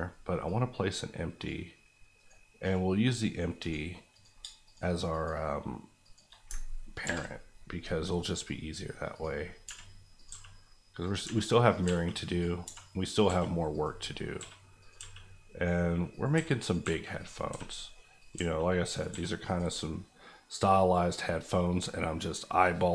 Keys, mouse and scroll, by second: 0.4 click, 2.1 right click, 2.6 click, 5.1 Left, 6.5 ctrl+Left, 7.0 ctrl+p, 8.4 click, 9.6-13.2 typing, 10.1 click, 11.0 click, 11.7 click, 12.2 click, 13.1 click, 13.7 click, 14.0-14.3 scroll down 1, 14.3 s, 14.8 click, 15.0 g, 16.1 click, 16.3 s, 16.6 click, 16.8 g, 17.1 click, 17.5 s, 18.5 g, 18.9 click, 19.1 s, 19.4 click, 19.8-22.9 middle drag.